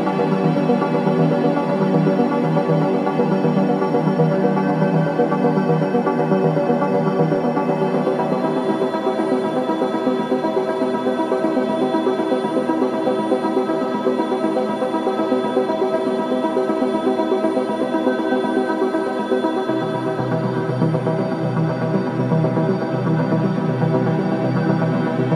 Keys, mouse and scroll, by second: 3.1-12.3 shift+drag, 12.3-17.4 ctrl+drag, 17.8 ctrl+z, 19.5-20.0 scroll up 2, 20.6 shift+click, 20.6 shift+-, 21.6 ctrl+z, 22.7-25.3 shift+drag.